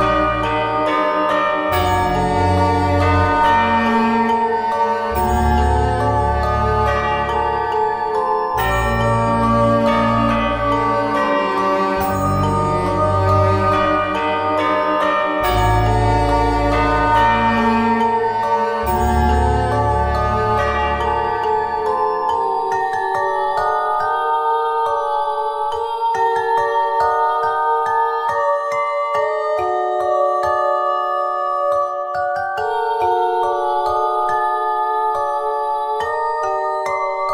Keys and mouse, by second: 0.7 r, 5.4 r, 7.8 click, 10.4 s, 11.2 z, 11.7 Tab, 13.1 KP_1, 16.4 Tab, 17.0 ctrl+Tab, 18.8 z, 19.1 c, 26.1 click, 26.9 shift+d, 36.0-37.3 middle drag.